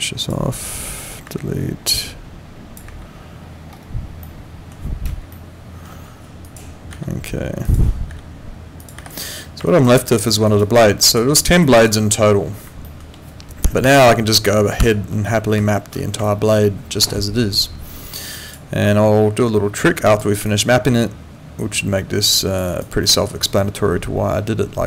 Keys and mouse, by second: 1.2 Delete, 1.9 click, 2.9 Delete, 4.3 middle click, 5.3 alt+middle click, 6.4 click, 6.9 Delete, 7.7 click, 8.1 Delete, 8.8 click, 9.0 Delete, 9.7 right click, 10.0 click, 10.3 middle click, 10.5 right click, 10.7 click, 11.3 right click, 11.6 click, 12.9 middle click, 13.8 F9, 18.8 alt+click, 20.1 click, 20.4 alt+click, 22.7 alt+right click, 23.0 alt+middle click, 23.4 alt+click.